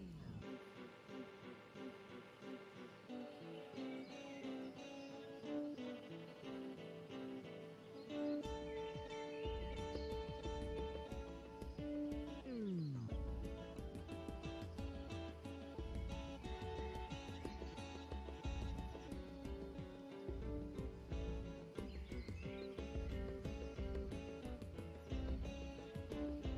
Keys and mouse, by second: 0.7 KP_0, 1.5 KP_0, 3.4 ctrl+Tab, 9.3-10.6 drag, 9.6 Tab, 9.8 s, 10.7 Tab, 10.7 drag, 11.6-13.8 drag, 13.8-16.6 middle drag, 16.6 click, 17.1 click, 17.7 middle click, 18.0 z, 18.5-19.3 drag, 19.3 middle click, 19.7-21.1 right drag, 21.2 g, 21.6 right drag, 21.8-22.4 drag, 21.8 g, 22.4 right drag, 22.4 g, 22.6-23.1 drag, 23.1-23.6 right drag, 23.1 z, 23.8 right click.